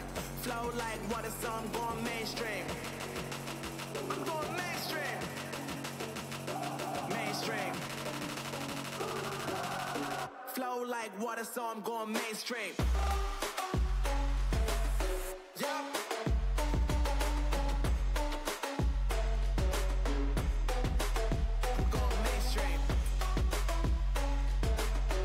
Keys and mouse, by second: 0.7 c, 10.8 z, 11.3-13.1 drag, 13.3 Tab, 14.8 Tab.